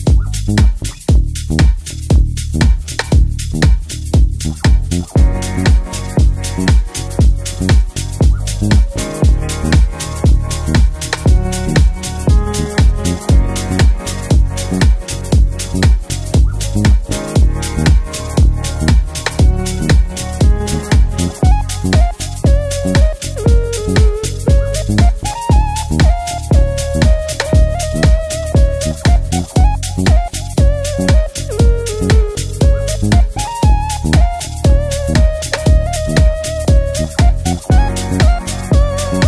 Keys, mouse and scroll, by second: 2.7-4.0 drag, 5.1 right click, 6.0 click, 10.2 right click, 11.1 click, 17.9 click, 21.4 z, 22.4-22.7 click, 24.8 ctrl+-, 25.7 space, 26.1 click, 26.3-26.7 space, 27.4-33.5 drag, 36.6 click, 37.8 click.